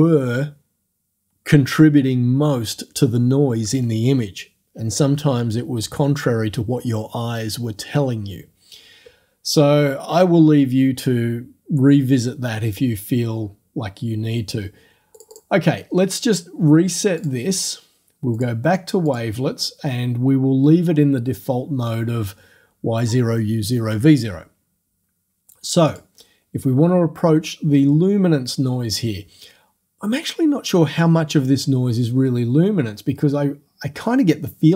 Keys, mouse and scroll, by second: 15.2 click, 17.2 click, 18.4 click, 19.1 click, 25.9 click, 26.4-30.7 middle drag.